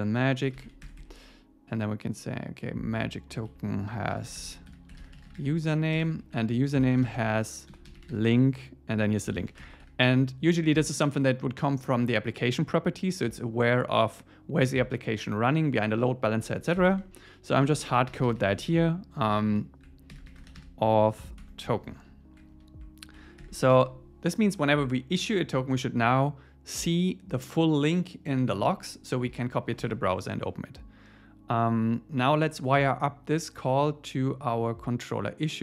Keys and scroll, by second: 0.9 Escape, 3.5 Right, 6.0 Return, 6.2 Right, 21.4 Tab, 24.6 super+s, 29.3 super+s.